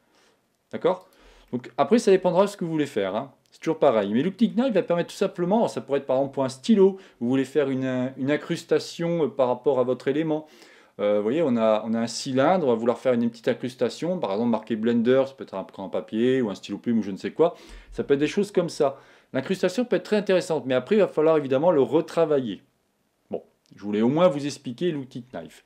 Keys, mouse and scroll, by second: 1.1-3.4 drag, 1.5-4.3 middle drag, 2.0 Tab.